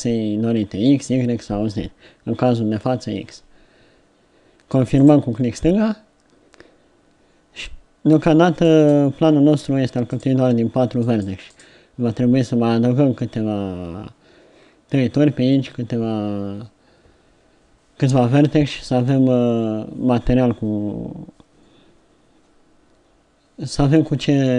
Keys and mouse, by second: 8.8-10.2 right drag, 10.2 middle click, 11.1 right click, 11.6-24.5 right drag.